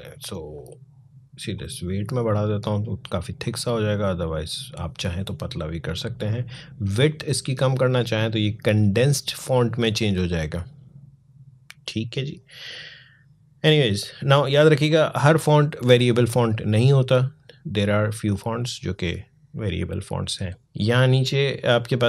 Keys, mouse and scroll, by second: 20.7 click.